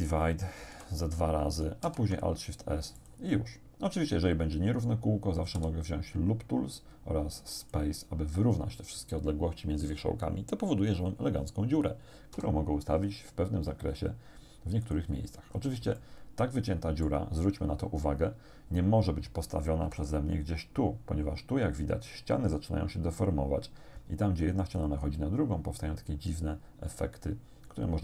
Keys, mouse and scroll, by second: 0.3 click, 0.7 shift+r, 1.9 alt+shift+s, 3.0 click, 5.6 w, 7.7 click, 12.4 g, 14.9 click, 15.5 scroll down 2, 16.0-17.3 shift+middle drag, 19.9 g, 24.8 click.